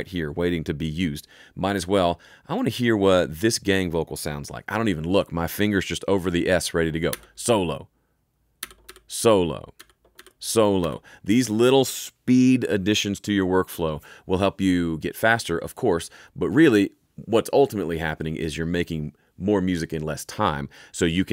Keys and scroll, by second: 7.0 s, 8.5 s.